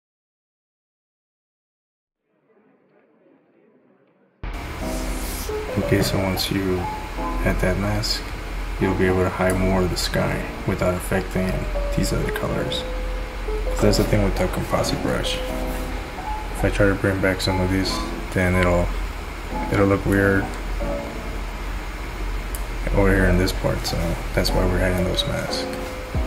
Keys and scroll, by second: 3.0 ctrl+z.